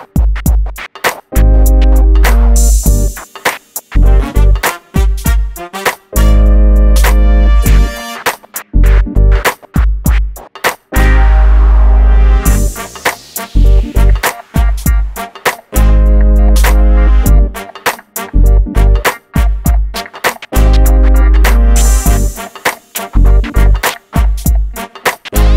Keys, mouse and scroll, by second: 0.6 p, 0.8 click, 1.1 scroll down 1, 2.6-2.9 scroll down 1, 3.2 shift+middle click, 4.4-4.9 scroll up 1, 8.7 Escape, 8.9 scroll down 1, 9.5 shift+middle click, 10.0-10.7 scroll up 1, 10.8 ctrl+z, 11.6-12.0 scroll up 1, 12.0 middle click, 12.8 click, 13.2-13.7 scroll up 1, 13.7 click, 15.6 m, 16.0 click, 16.5-17.3 scroll down 1, 17.9 scroll up 1, 18.3 middle click, 18.9-19.5 scroll up 1, 21.3 click, 21.7 middle click, 22.9-24.0 scroll up 1, 24.0 |, 24.8 click.